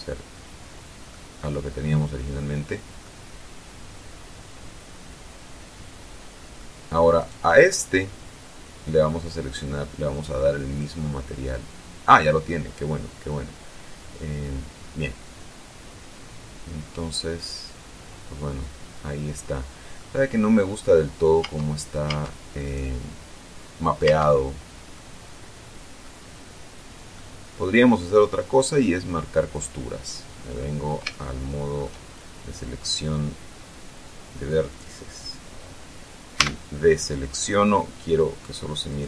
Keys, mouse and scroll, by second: 0.1 click, 1.4-3.4 middle drag, 3.6-7.0 middle drag, 7.5 right click, 11.0 click, 15.3-20.4 middle drag, 21.7 Tab, 22.9 right click, 24.3 Tab, 25.2-26.5 middle drag, 26.5 scroll up 1, 27.4-28.4 middle drag, 29.7 click, 31.3 shift+middle click, 36.6 a.